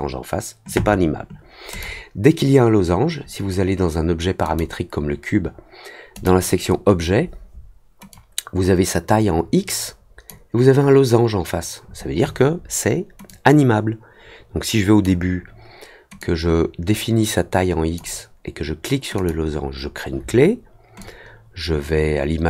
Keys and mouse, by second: 1.7 click, 4.4 click, 6.1 click, 8.1-10.2 drag, 13.2-15.0 drag, 16.1-17.9 drag, 19.1 click, 20.9-22.4 drag.